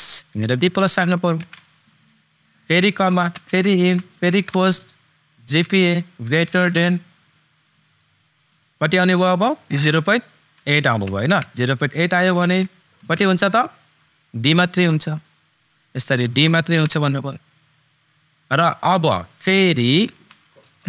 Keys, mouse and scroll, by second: 0.4 shift+super+Num_Lock, 0.7 shift+super+d, 1.0 shift+super+Right, 3.5 super+i, 3.8 super+f, 4.4 shift+super+9, 5.6 click, 6.4 ., 12.4 super+., 15.8 shift+super+Num_Lock, 16.2 shift+super+d, 16.8 shift+super+'.